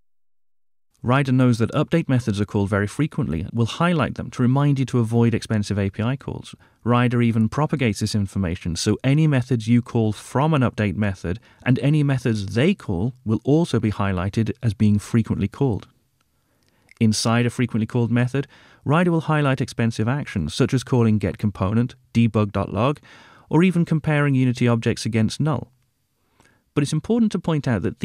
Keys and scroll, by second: 6.0 super+b, 14.4 super+b, 22.8 super+b.